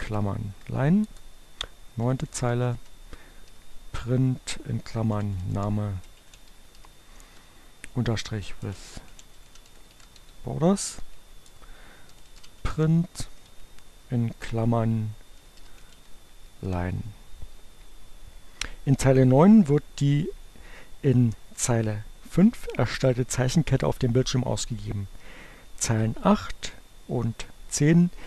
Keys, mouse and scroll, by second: 0.0-0.7 typing, 1.7-10.8 typing, 11.0 Return, 11.8-13.0 typing, 14.6-16.2 typing.